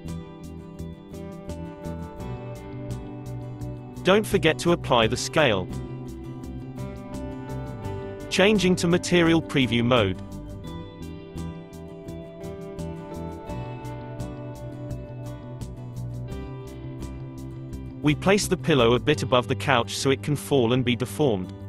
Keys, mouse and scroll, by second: 1.3 click, 2.4-4.5 middle drag, 4.5 ctrl+a, 5.5 ctrl+a, 6.0 scroll up 3, 7.6 scroll up 1, 7.9 click, 8.4-9.4 middle drag, 9.4-10.3 scroll up 4, 10.3-13.8 middle drag, 13.8 s, 15.4-15.9 middle drag, 16.4 ctrl+a, 17.2 ctrl+a, 18.0 click, 19.2-20.3 middle drag, 20.3 Tab.